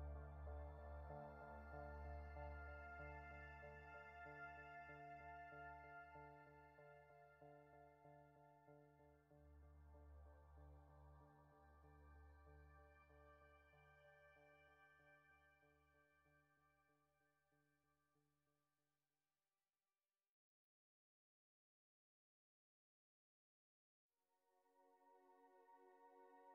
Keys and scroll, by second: 4.4 space, 6.6 space, 22.9 space.